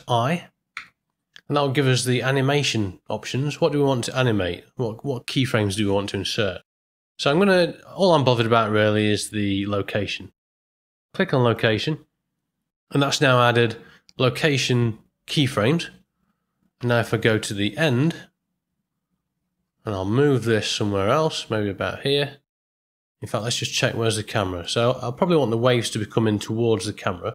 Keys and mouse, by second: 0.7 i, 18.0 shift+Right, 20.7 g, 23.7 middle click, 24.6 ctrl+middle click, 26.8-27.3 middle drag.